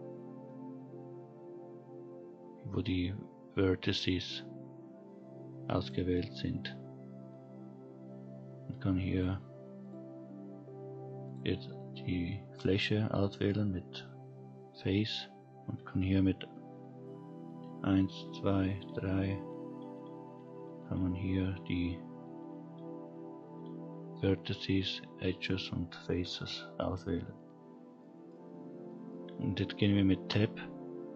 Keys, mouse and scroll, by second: 5.8 click, 9.1 click, 9.8 click, 11.2 click, 17.4-21.0 typing, 22.2 2, 22.7 3, 23.4 1, 25.2 2, 26.2 3, 26.7 1, 27.6-28.0 scroll down 2, 28.0 middle click, 28.8 middle click, 30.2 Tab.